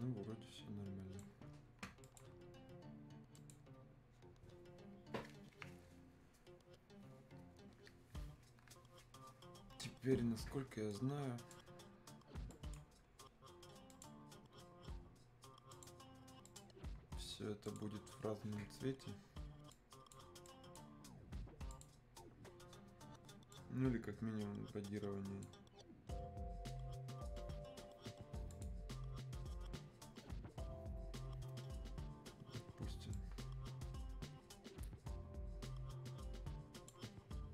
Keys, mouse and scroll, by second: 10.9 click, 11.7 scroll down 1, 12.5-28.0 drag, 28.5 click, 33.1-37.5 drag.